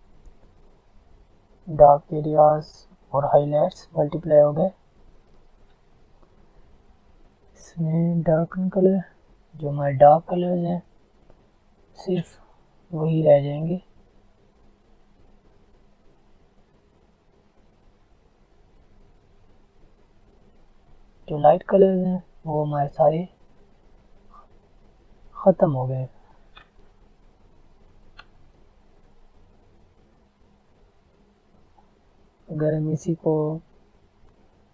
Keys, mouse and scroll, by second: 6.7 click, 14.0 click, 18.9 click, 19.4-25.8 drag, 27.6-29.8 alt+scroll up 4, 29.8 click, 30.4 alt+scroll up 1, 30.9 click, 31.2 alt+scroll up 1, 31.9 alt+scroll down 1, 33.1 alt+scroll up 1, 33.4-33.8 alt+scroll down 1, 34.4 click.